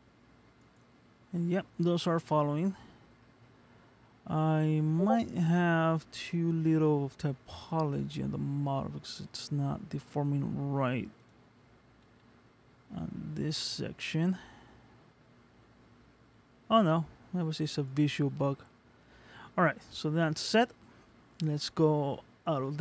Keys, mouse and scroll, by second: 1.3 middle click, 2.7-3.3 scroll up 2, 3.3 middle click, 4.6 scroll up 1, 5.8 middle click, 7.8 click, 8.7 scroll down 1, 9.2-9.8 scroll down 2, 9.8-10.6 scroll down 2, 11.4 click, 12.1 g, 18.7 middle click, 22.5 ctrl+Tab.